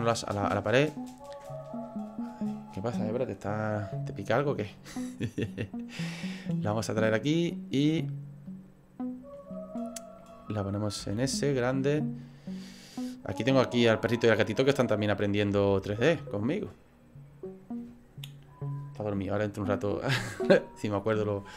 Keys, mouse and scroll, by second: 0.5 click, 3.8 middle click, 4.8 click, 6.6 click, 7.5 middle click, 8.4 click, 9.4-9.7 scroll up 3, 9.7 middle click, 11.0 s, 12.7 middle click, 13.8 click, 14.8 middle click, 15.0 middle click, 15.5 s, 16.9 click.